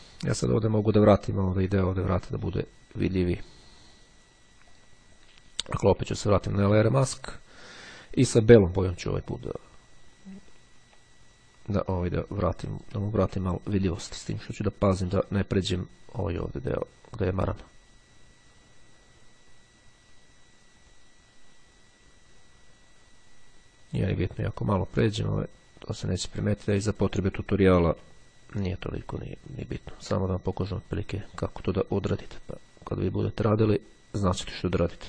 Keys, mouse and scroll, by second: 2.4-4.0 drag, 4.7 click, 6.3-6.8 ctrl+scroll up 2, 7.6 click, 9.4 click, 10.6-11.2 ctrl+scroll up 2, 12.0-13.4 drag, 14.6-27.6 drag, 28.1 x, 28.8-31.3 drag, 31.7 x, 32.2-33.7 drag.